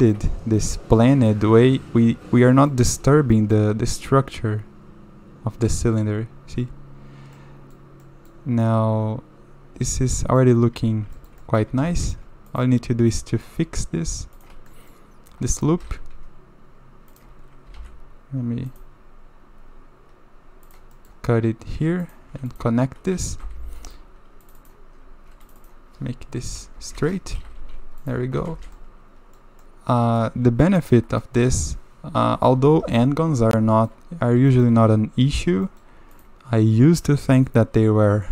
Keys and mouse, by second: 0.0 shift+middle click, 0.1 click, 1.1 click, 2.5 click, 3.4 click, 3.9 click, 7.4 click, 8.0 click, 8.6-10.4 middle drag, 10.7 1, 11.2 shift+middle click, 11.7 a, 11.9 a, 12.0 middle click, 12.5 click, 13.1 click, 14.7 click, 15.5 click, 15.8 g, 17.7 ctrl+r, 21.0 click, 22.0 click, 23.4 j, 23.8 click, 24.6 click, 25.6 shift+click, 26.8 s, 27.4 g, 28.4 a, 28.5 a, 28.8-29.4 drag, 29.6 click, 31.2 drag, 32.8 KP_7, 33.7 shift+middle click, 34.5 shift+middle click, 35.6 shift+click, 37.3 shift+click.